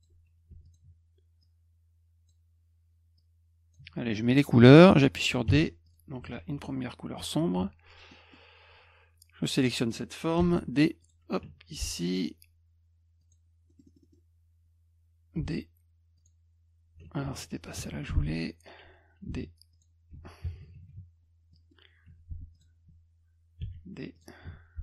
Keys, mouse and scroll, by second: 0.6 ctrl+click, 1.4 click, 3.2 click, 5.5 d, 5.9 click, 6.2 F1, 8.1 middle click, 9.5 click, 10.4 d, 11.0 click, 11.5 F2, 12.1 click, 13.2 click, 13.7 middle click, 13.7-14.1 scroll up 3, 13.9 middle click, 14.0 middle click, 15.4 d, 16.2 click, 17.2 ctrl+z, 17.6 middle click, 17.8 F2, 18.3 click, 19.3 d, 19.7 click, 20.2 F1, 21.5 middle click, 22.5 click, 23.6 d, 24.1 click, 24.4 F2.